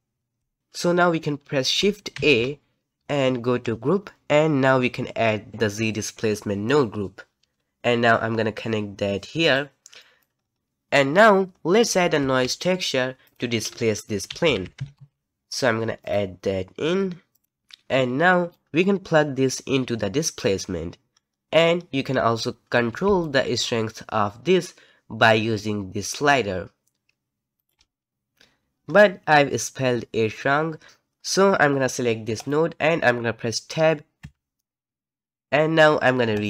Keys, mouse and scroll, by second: 0.6 Left, 2.1 shift+a, 10.0 middle click, 10.3 scroll up 3, 12.2 shift+a, 17.4 middle click, 18.5-21.1 drag, 21.1-21.8 scroll up 2, 21.8-23.2 scroll down 1, 23.2-26.2 shift+drag, 28.1-28.9 scroll down 1, 28.9-30.9 scroll up 1, 32.4 click, 34.2 Tab, 36.3-36.4 drag.